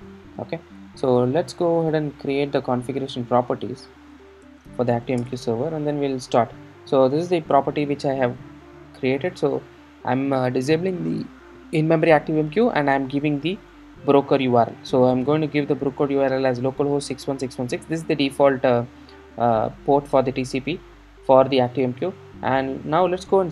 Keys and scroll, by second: 5.2 Return.